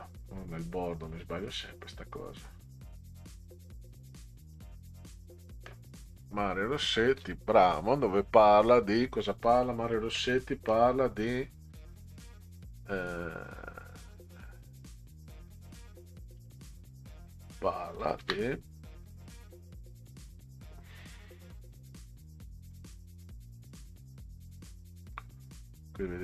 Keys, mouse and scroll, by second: 1.6 scroll up 2, 2.6 click, 3.2 click, 3.5 scroll down 2, 4.5 click, 6.2 click, 16.4 click, 18.0 ctrl+c, 18.2 ctrl+v, 19.5-21.3 drag, 23.2-25.8 drag.